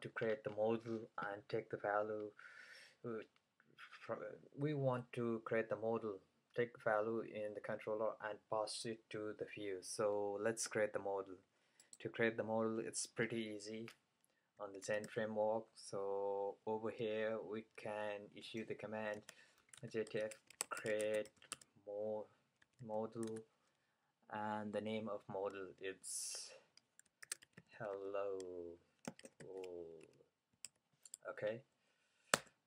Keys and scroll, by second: 15.1-15.9 typing, 19.2-23.4 typing, 27.0-31.2 typing.